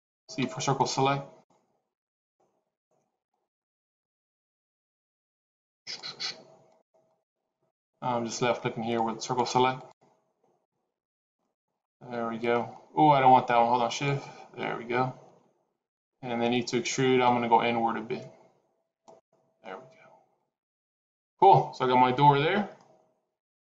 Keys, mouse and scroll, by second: 0.3 c, 11.7 middle click, 12.6-13.7 scroll up 1, 13.7 shift+click, 17.1 e, 19.4 middle click, 22.6 middle click.